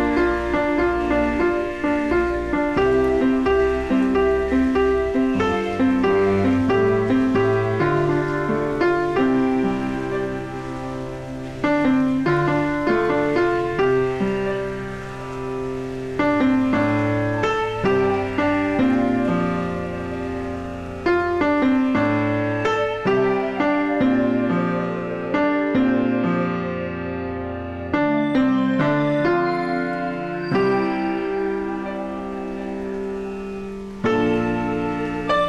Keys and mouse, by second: 5.9 click, 6.5 click, 7.5 a, 7.7 click, 9.6 click, 9.7 right click, 10.3 click, 22.9 ctrl+x, 23.3 click, 27.1 ctrl+click, 27.5 s.